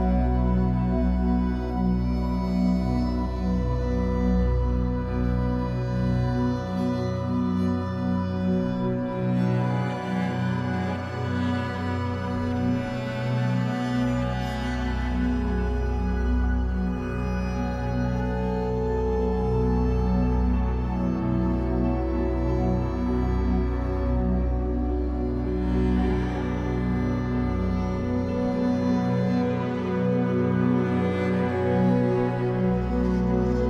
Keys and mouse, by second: 1.1-2.6 typing, 3.0-4.7 drag, 4.9-7.5 typing, 6.2 click, 8.9 shift+click, 9.7 ctrl+alt+click, 10.0-10.8 typing, 10.2 alt+shift+click, 10.6 ctrl+alt+click, 11.4 alt+shift+click, 11.7 ctrl+alt+click, 12.4-13.1 typing, 14.2-18.1 alt+shift+drag, 14.4-16.5 typing, 18.3-19.8 typing, 18.8-20.3 ctrl+alt+drag, 20.9 typing, 21.7 click, 22.0 typing, 22.6 click, 23.1 ctrl+alt+click, 23.7-24.9 alt+shift+drag, 25.3-29.6 typing, 26.1 click, 27.2 click, 28.1 click, 29.1 click, 30.5 click, 30.8-31.6 typing, 31.1-33.2 ctrl+alt+drag, 33.4-33.6 typing.